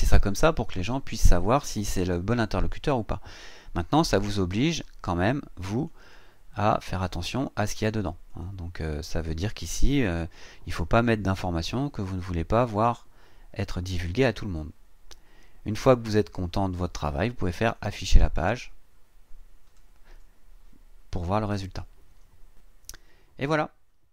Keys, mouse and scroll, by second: 5.7 click, 8.2 click, 13.9-14.2 scroll down 2, 17.6 click.